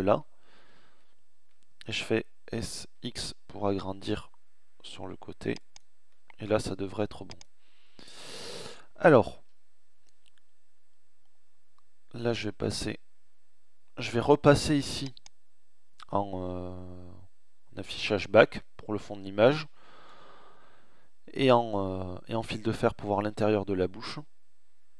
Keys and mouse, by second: 0.0 alt+middle click, 1.5 s, 4.7 click, 5.1 middle click, 5.3 click, 5.3 middle click, 8.3 KP_1, 11.1 KP_1, 19.0 z.